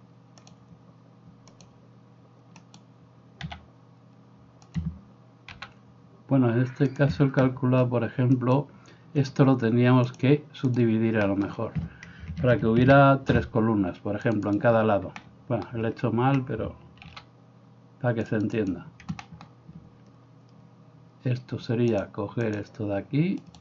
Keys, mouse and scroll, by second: 0.6-4.9 drag, 2.7 middle click, 2.7 right click, 3.5 s, 4.9-8.5 middle drag, 5.5 g, 8.5 right click, 8.8-10.3 shift+middle drag, 10.3-14.7 drag, 12.8 ctrl+r, 14.7-22.1 middle drag, 17.1 ctrl+r, 22.1-23.6 drag, 23.5 middle click, 23.5 right click.